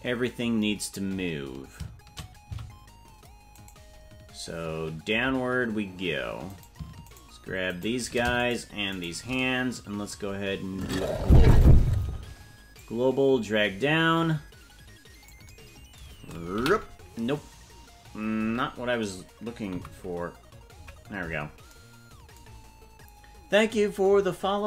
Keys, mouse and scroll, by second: 2.4 c, 6.6 right click, 9.0 shift+right click, 10.8 click, 12.7-15.3 drag, 16.5 KP_3, 18.4 KP_Decimal, 19.7 KP_5, 20.7 KP_Decimal, 22.4 scroll down 1.